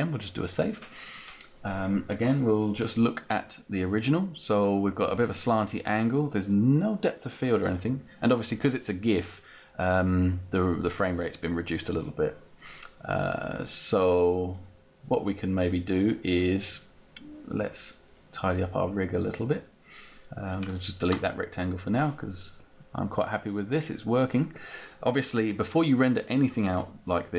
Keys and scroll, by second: 21.1 Delete.